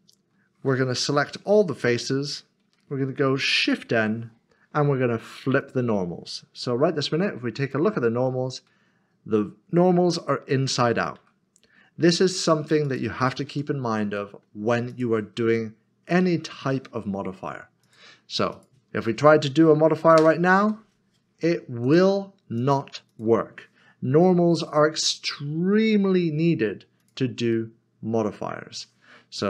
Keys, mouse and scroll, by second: 1.8 3, 3.6 typing, 5.6 click, 6.8 typing, 7.6 click, 12.5 typing, 12.8 click, 14.1 Tab, 14.3 middle click, 14.9 click, 15.6 middle click, 17.8 click, 18.3 s, 18.5 shift+click, 20.2 ctrl+KP_Subtract, 21.8 click, 24.1 g, 27.0 click, 27.5 middle click.